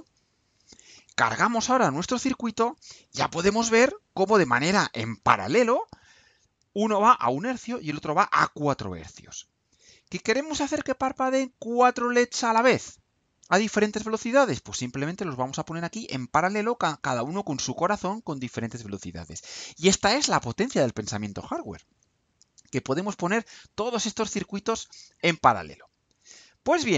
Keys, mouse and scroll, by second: 0.3 ctrl+u, 9.7 click.